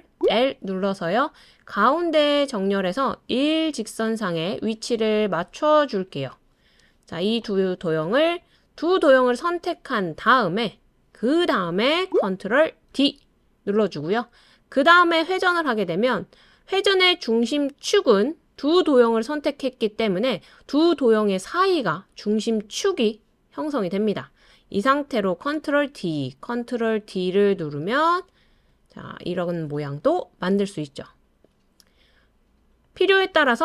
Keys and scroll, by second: 12.9 super+d, 25.5 super+d, 26.6 super+d, 27.3 super+d.